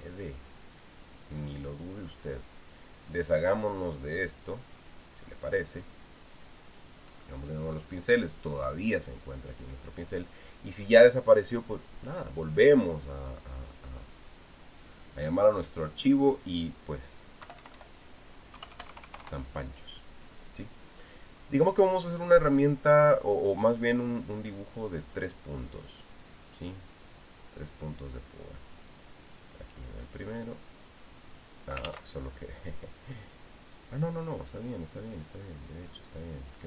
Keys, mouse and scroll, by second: 0.7 click, 1.6-6.7 drag, 8.2 click, 9.8 click, 16.2 click, 18.2 Delete, 19.3 KP_2, 19.5 KP_5, 19.7 KP_0, 20.0 KP_Enter, 30.1 click, 32.9 ctrl+z.